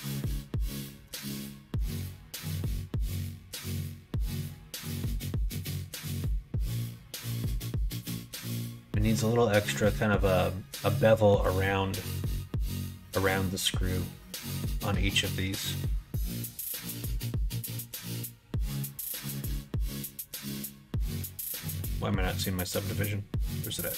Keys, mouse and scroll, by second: 2.6 middle click, 2.8 right click, 3.2 ctrl+z, 3.5 ctrl+z, 5.5 q.